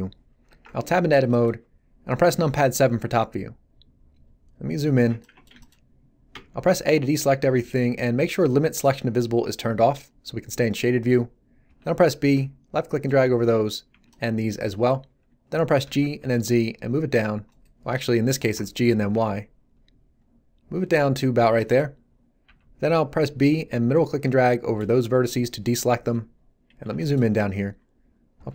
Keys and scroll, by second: 0.5 Tab, 2.6 7, 6.3 a, 11.6 b, 15.8 g, 16.2 z, 18.5 g, 18.8 y, 22.4 b, 28.3 g.